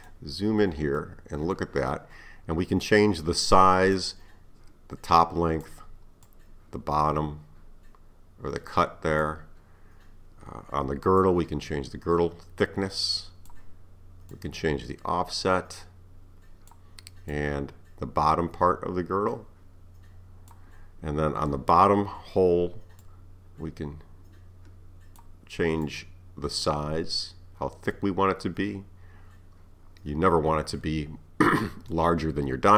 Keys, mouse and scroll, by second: 0.5-1.0 scroll up 2, 1.0-4.0 middle drag, 4.0-9.3 drag, 11.2-14.2 drag, 14.3-20.4 drag, 21.1-21.6 scroll down 2, 23.1-28.9 drag.